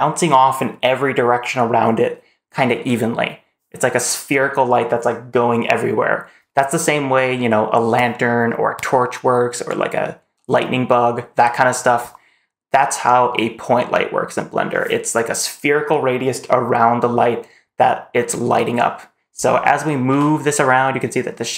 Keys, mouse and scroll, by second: 19.5 click, 19.5 middle click, 19.9 g.